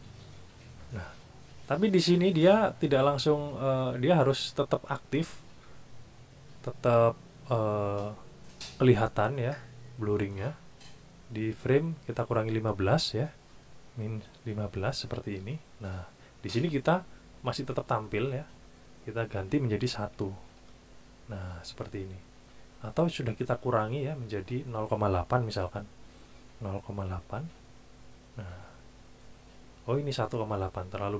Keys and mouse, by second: 12.4 click, 13.9 KP_Subtract, 14.4 KP_1, 14.7 KP_5, 15.3 KP_Enter, 18.7 click, 20.2 KP_1, 20.5 KP_Enter, 24.4 click, 25.7 KP_1, 26.1 KP_Decimal, 26.9 KP_8, 30.4 click.